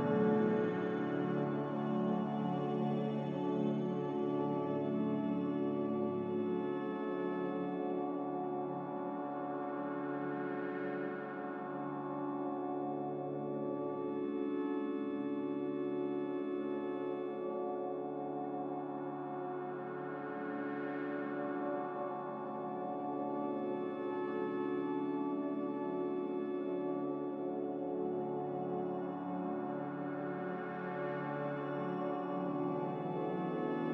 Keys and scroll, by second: 10.4 Delete, 10.7 Delete, 12.2 ctrl+z, 12.4 ctrl+z, 12.6 ctrl+z, 17.2 Delete, 17.4 Delete, 21.6-22.9 typing, 25.4-26.1 typing, 29.1 5, 31.7 5.